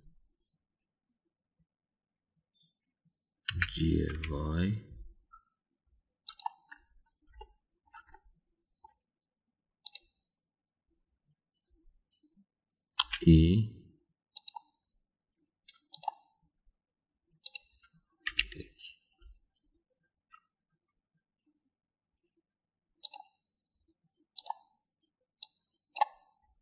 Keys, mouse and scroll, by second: 0.0 ctrl+l, 4.5 g, 8.4 shift+middle click, 9.1 middle click, 14.0 e, 18.4 click, 19.2 KP_1, 24.0 click, 25.4 click, 26.4 click.